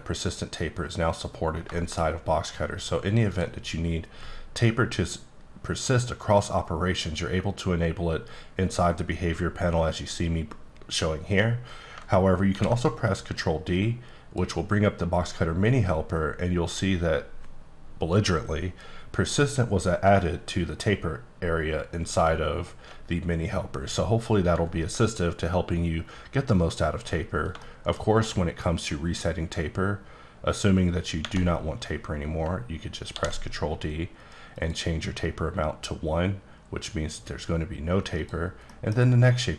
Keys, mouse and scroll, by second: 0.1 click, 1.7 shift+middle click, 3.3 click, 12.4 ctrl+d, 13.6 click, 27.4 shift+click, 27.5 shift+middle click, 29.4 click, 33.3 ctrl+d, 34.5 click, 38.2 click, 38.7 middle click, 39.3 click.